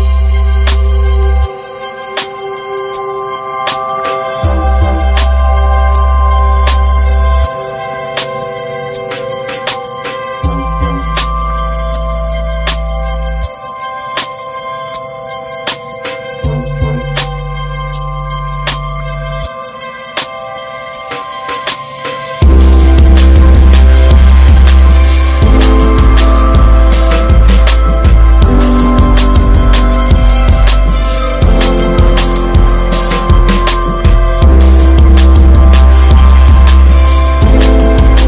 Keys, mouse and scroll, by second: 0.2 Tab, 0.4 scroll up 1, 0.7 click, 1.1 l, 2.5 ctrl+z, 3.3 click, 4.0 click, 4.3 Tab, 4.4 drag, 4.6 scroll down 3, 5.0-6.7 middle drag, 6.7 scroll up 2, 7.0-9.9 shift+middle drag, 9.9 Tab, 12.2 click, 12.7-13.1 scroll down 2, 13.1 middle click, 13.5 Tab, 13.8 drag, 14.1 scroll down 3, 14.2-14.6 middle drag, 14.6 ctrl+s, 14.9 middle click, 15.1-15.5 scroll up 1, 15.5-19.1 middle drag, 19.1-19.7 scroll up 3, 19.4 shift+middle drag, 20.5 click, 20.8-22.0 middle drag, 22.0 click, 23.7-24.9 drag, 25.4 Tab, 25.8 Tab, 26.0 click, 26.3-28.1 middle drag, 28.5 click, 31.3 click, 31.9 click, 32.1 ctrl+a, 33.3 shift+click, 34.5 ctrl+j, 34.8 middle click, 35.3 click, 36.4-37.2 drag, 37.2-38.2 middle drag.